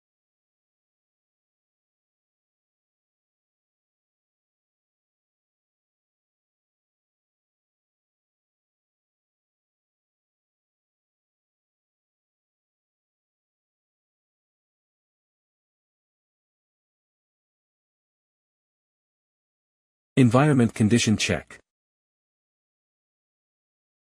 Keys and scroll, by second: 0.8 super+d.